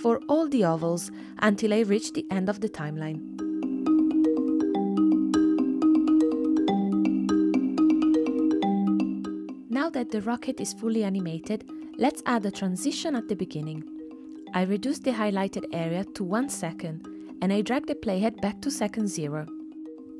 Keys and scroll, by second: 0.2 super+v, 1.4 super+c, 1.5 super+v, 2.3 super+v, 3.5 super+c, 3.6 super+v, 4.2 super+v, 9.3 space.